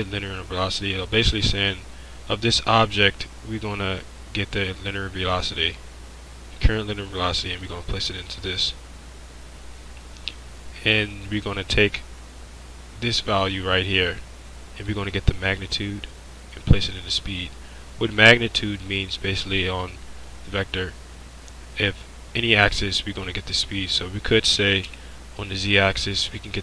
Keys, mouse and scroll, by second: 24.9 z.